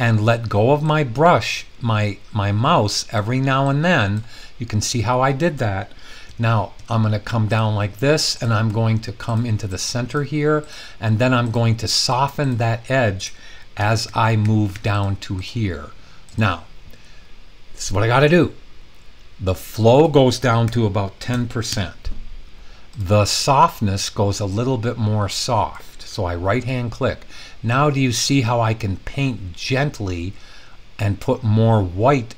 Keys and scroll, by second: 6.3-6.7 typing, 13.7-14.7 typing, 20.6-21.7 typing, 26.6 Return.